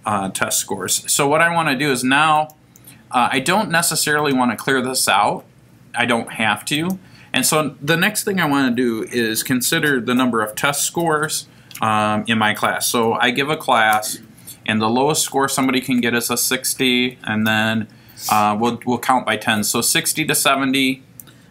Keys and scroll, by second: 2.4 Right, 4.2 Left, 6.8 Right, 15.2 6, 15.5 0, 16.4 Down, 17.1 7, 17.5 0, 20.1 Down.